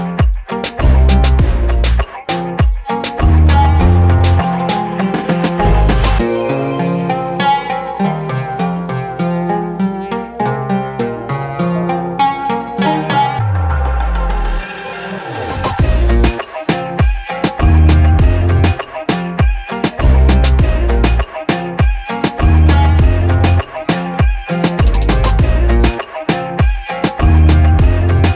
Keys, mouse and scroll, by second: 3.4 alt+click, 4.5-6.5 drag, 6.9 scroll up 2, 7.2 alt+middle click, 7.5 alt+middle click, 7.9 alt+middle click, 8.2 alt+middle click, 8.5-9.6 scroll down 6, 9.2 alt+click, 9.7 alt+middle click, 10.7-15.2 drag, 15.4 scroll down 1, 15.7 alt+click, 16.2-17.5 scroll up 6, 17.6 alt+middle click, 18.0-18.7 scroll up 4, 18.8 alt+middle click, 19.1 scroll down 2, 19.1 middle click, 19.4 alt+drag, 20.0 alt+middle click, 20.6 alt+middle click, 21.5-25.0 shift+right drag, 25.3 shift+right click, 26.6 alt+click, 27.7 shift+right click.